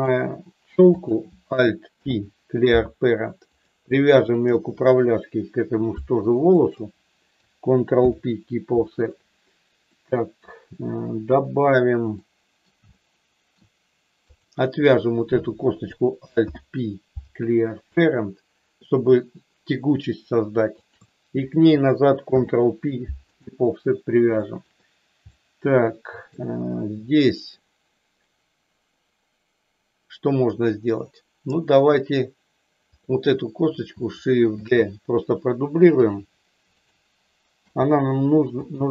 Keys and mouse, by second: 1.8 alt+p, 4.2 shift+click, 6.6 shift+click, 8.0 ctrl+p, 9.8 middle click, 12.2 middle click, 13.0 shift+middle click, 14.2 click, 16.5 alt+p, 20.8 shift+click, 22.2 ctrl+p, 24.5 shift+middle click, 25.2-26.2 middle drag, 26.3-27.5 middle drag, 33.0 click, 34.6 shift+d, 37.6 g, 38.5 click.